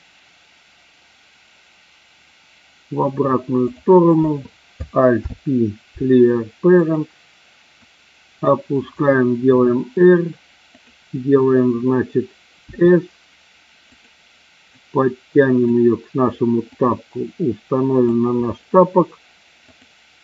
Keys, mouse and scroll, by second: 3.7 click, 4.1 click, 5.2 alt+p, 7.7 click, 9.4 r, 10.7 click, 12.6 s, 13.8 click, 14.7 click, 16.7-18.0 drag.